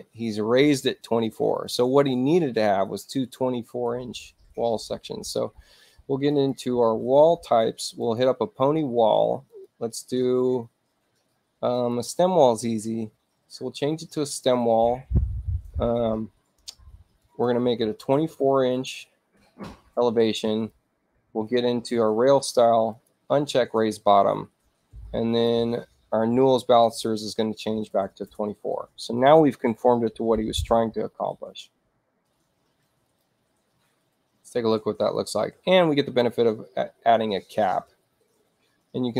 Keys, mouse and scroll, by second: 6.2 click, 7.9 click, 9.4 click, 11.6 click, 17.1 click, 18.2 2, 18.5 Tab, 20.6 click, 22.8 click, 25.2 click, 26.7 click, 27.8 2, 28.2 Tab, 32.9 click.